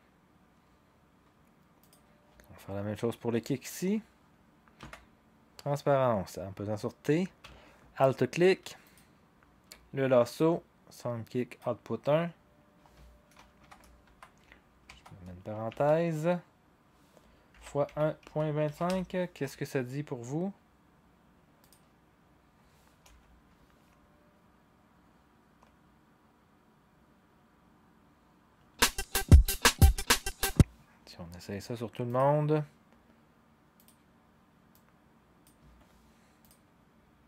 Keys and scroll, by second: 4.9 t, 13.6-16.2 typing, 17.5-19.4 typing, 23.0 0, 28.5 0, 30.4 0.